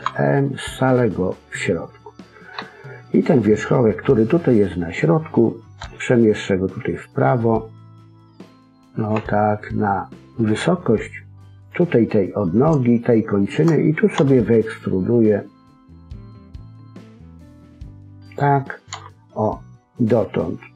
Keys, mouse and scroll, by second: 2.5 KP_1, 5.7 g, 9.1 KP_3, 10.5 g, 12.4 scroll up 2, 12.9 shift+middle click, 14.1 e, 18.9 e.